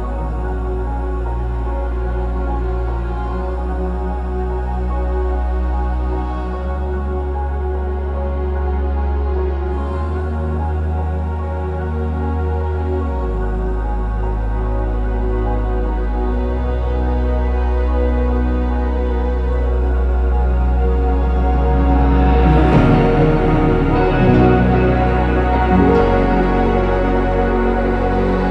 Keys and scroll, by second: 1.6-4.6 typing, 8.8-11.5 typing, 13.3-15.5 typing, 17.6-20.9 typing, 23.3 BackSpace, 23.5 BackSpace, 23.6 BackSpace, 23.8 BackSpace, 26.2 BackSpace, 27.8 BackSpace, 28.0 BackSpace, 28.4 BackSpace.